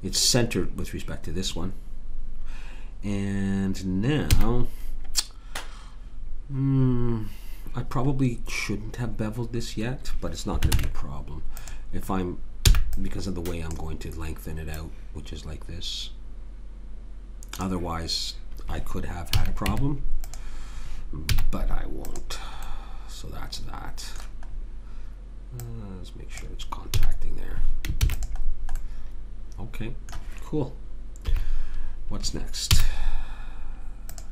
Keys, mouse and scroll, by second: 4.3 a, 10.7 ctrl+Tab, 12.7 b, 19.3 a, 19.7 Tab, 21.3 z, 24.5-26.3 middle drag, 25.6 click, 27.0 a, 28.0 ctrl+s, 31.2 KP_3, 32.7 z.